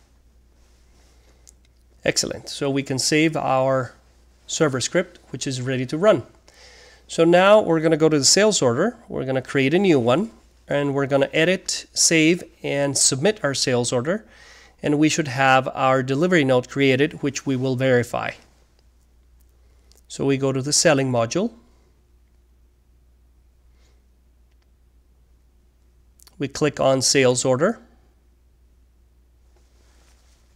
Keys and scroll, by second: 0.0-0.5 typing.